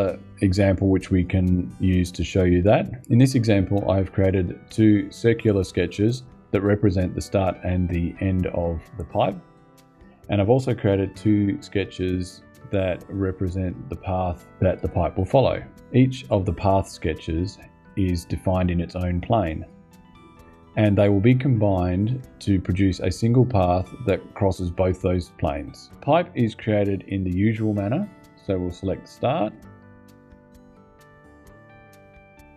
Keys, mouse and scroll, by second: 2.9 click, 28.8 click, 30.8 click.